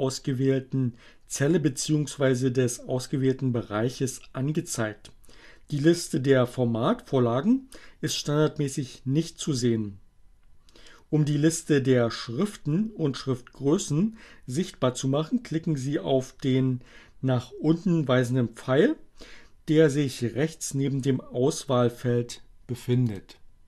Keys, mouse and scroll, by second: 23.1 click.